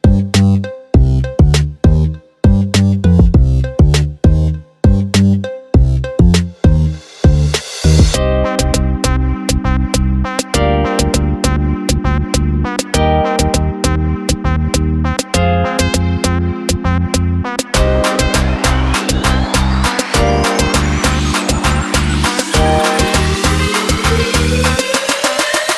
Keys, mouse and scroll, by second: 0.0 click, 0.4 click, 1.2 click, 1.4 click, 2.0 click, 2.2-4.0 drag, 4.2 click, 4.8 ctrl+d, 9.2 click, 10.0 click, 10.6 click, 12.7 click, 12.9 drag, 13.3-13.6 drag, 13.8 click, 14.6 click, 16.1 ctrl+c, 16.9 ctrl+v, 17.9 ctrl+t, 18.5 right click, 19.8 click, 20.1 click, 21.1 click, 23.2-25.7 drag.